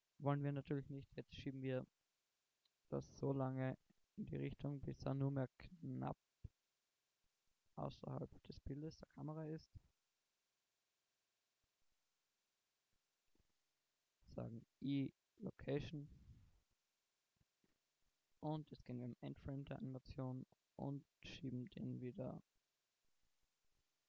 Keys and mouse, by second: 3.0-4.8 drag, 10.3-14.0 middle drag, 14.4 i, 18.1 shift+Right, 20.6-24.0 middle drag.